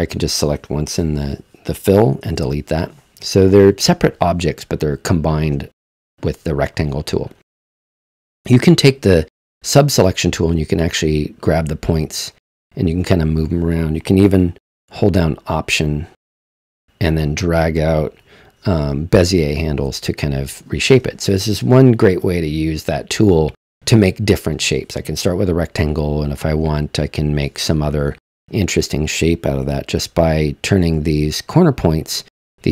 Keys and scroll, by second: 0.9 BackSpace, 2.3 super+z.